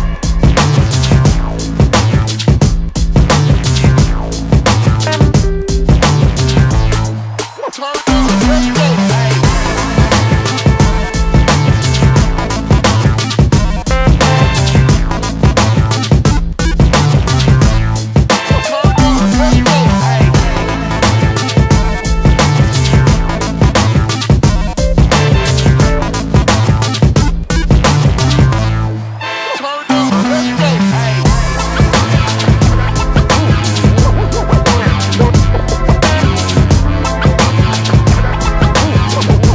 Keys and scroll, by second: 0.3 space, 0.5 Escape, 3.8 shift+v, 6.9 space, 7.0 Escape, 8.8 b, 10.7 space, 10.8 Escape, 16.4 shift+v, 19.5 b, 22.1 shift+v, 23.8 space, 23.8 Escape, 27.2 b, 28.4 shift+v, 30.1 space, 30.1 Escape, 33.0 b, 34.2 shift+v, 36.1 shift+v, 37.7 space, 37.7 Escape, 38.2 space, 38.8 Escape, 39.1 space, 39.2 Escape.